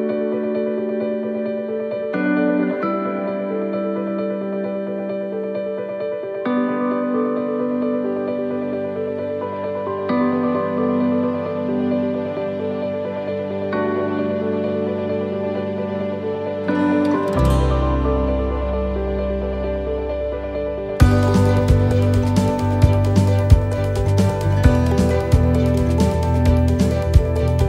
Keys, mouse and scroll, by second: 1.0 s, 3.4 middle click, 4.6-5.2 scroll down 4, 5.3 middle click, 5.8 shift+middle click, 6.2 scroll up 3, 6.8 shift+middle click, 7.3 middle click, 7.8 scroll up 1, 8.6 middle click, 9.5 right click, 10.1 shift+right click, 10.9 shift+right click, 12.0 shift+right click, 12.1 middle click, 13.0 right click, 14.8 click, 15.7 right click, 16.7 click, 19.4 middle click, 20.3 shift+middle click, 21.3 right click, 22.6 shift+right click, 23.7 click, 25.2 shift+middle click, 25.8 scroll up 1, 26.3 shift+middle click, 26.9 middle click, 27.6 middle click.